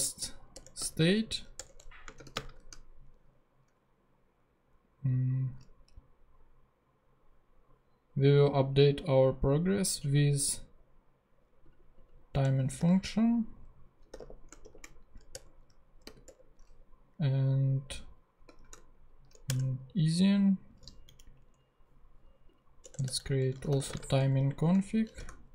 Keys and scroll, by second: 0.0-0.3 typing, 0.5 Return, 1.6 Return, 2.2 shift+/, 12.3 Return, 12.5-14.6 typing, 15.3 shift+Return, 15.9 Return, 16.1 ,, 16.3 Return, 18.5 shift+e, 19.4 shift+Return, 21.4 Down, 23.0 Return, 23.3-25.5 typing.